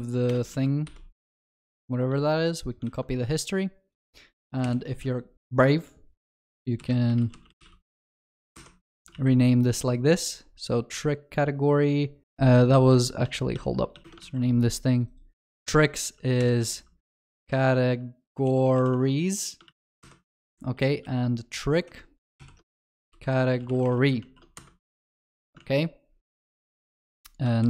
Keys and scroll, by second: 2.1 ctrl+s, 2.2 ctrl+c, 2.9 ctrl+v, 4.6 ctrl+alt+shift+j, 9.2 ctrl+s, 12.9 ctrl+z, 14.0 ctrl+s, 16.4 ctrl+alt+shift+j, 19.8 ctrl+s, 22.4 Escape, 22.4 ctrl+alt+shift+j, 24.3 ctrl+s, 25.3 ctrl+alt+shift+l, 25.6 ctrl+s, 27.6 ctrl+s.